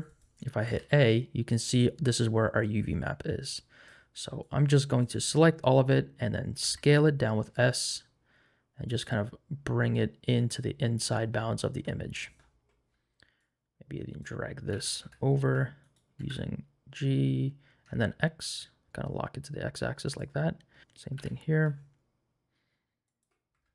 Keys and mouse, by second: 0.1 click, 0.6 a, 3.4 click, 4.4 click, 6.6 s, 8.9 click, 9.2 g, 13.4 click, 14.7 g, 15.0 y, 15.4 x, 16.2 g, 17.8 x, 20.1 click, 20.7 shift+middle click, 21.1 g, 21.5 x, 23.1 shift+click, 23.5 Tab.